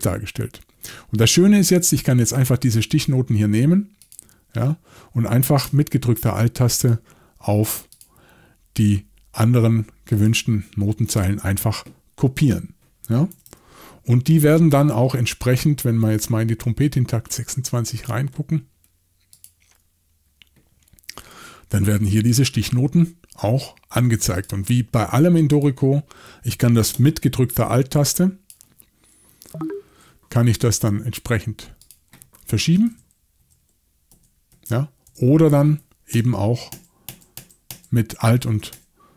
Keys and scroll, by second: 13.3 typing, 29.3 alt+Left, 32.9 alt+Left, 33.4 alt+Left, 34.1 alt+Right, 34.5 alt+Right, 35.1 alt+Left, 36.1 alt+shift+Right, 36.7 alt+shift+Right, 37.1 alt+shift+Right, 37.4 alt+shift+Right, 37.7 alt+shift+Right, 38.5 alt+shift+Right, 38.7 alt+shift+Right.